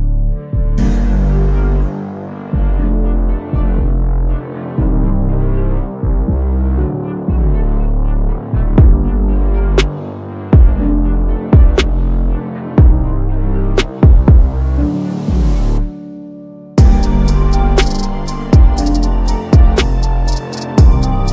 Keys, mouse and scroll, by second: 2.0 click, 3.2 click, 4.2-4.6 drag, 5.4 6, 6.2 click, 7.8 click, 8.2-9.2 typing, 9.1 click, 10.8 click, 11.6 click, 12.9-13.4 drag, 17.2-18.9 drag.